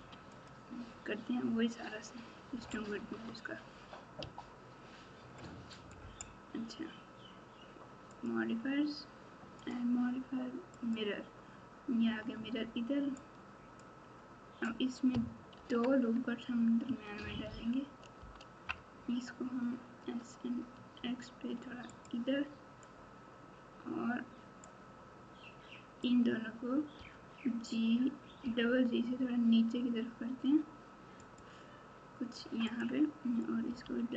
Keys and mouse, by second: 3.1 Tab, 4.2 r, 9.6-10.9 drag, 12.0 Tab, 13.2 click, 15.5 ctrl+r, 20.0 s, 24.9-26.0 drag, 26.9 g, 32.6 click, 33.6 g.